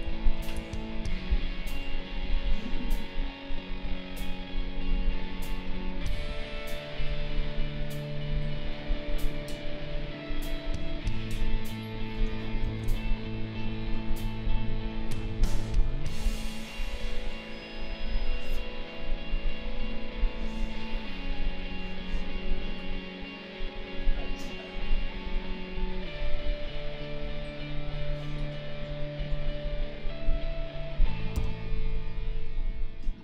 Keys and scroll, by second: 0.4 ctrl+shift+a, 12.6 ctrl+shift+a, 31.3 b.